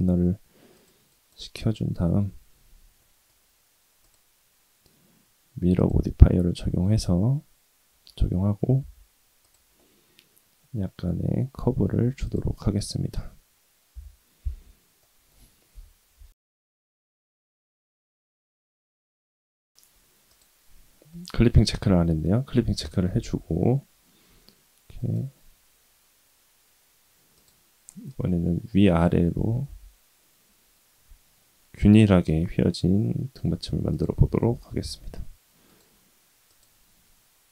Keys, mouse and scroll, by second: 2.1 Tab, 3.0 middle click, 4.0-5.9 drag, 6.2-8.0 middle drag, 8.6 s, 9.7-11.0 middle drag, 11.5 s, 12.5 middle click, 13.9 /, 14.4 Tab, 15.0 middle click, 15.7 KP_1, 16.3 Tab, 16.3 click, 16.3 g, 16.5 s, 18.5 click, 19.4 Tab, 19.7 click, 19.7 g, 20.3 click, 23.0 g, 27.3 click, 28.1 click, 29.5 s, 34.2 Tab, 34.6 s, 36.5-37.5 drag.